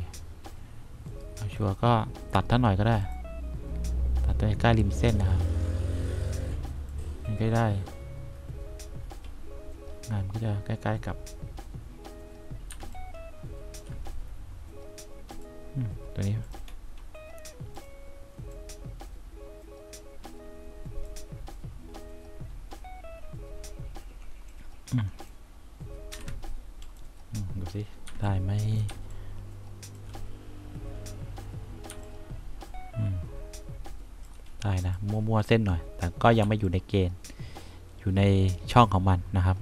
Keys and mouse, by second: 3.1 click, 12.9 1, 17.9 click, 18.8 click, 26.3 F1, 28.2 3, 29.0 1, 32.0 3, 36.6 3.